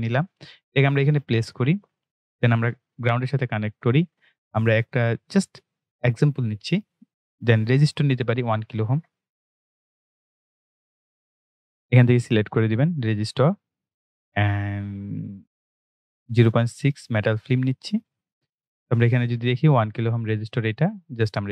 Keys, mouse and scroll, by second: 5.9 click, 9.6 k, 13.3 click, 19.7 click.